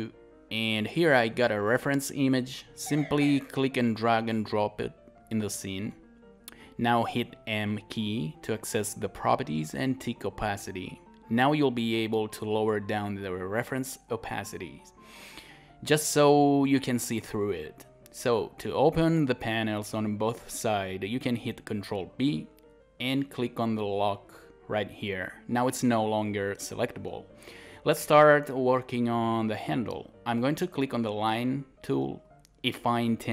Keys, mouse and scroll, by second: 7.3 m, 21.4 ctrl+b, 27.3 alt+right click, 30.2 scroll up 1, 32.5 click.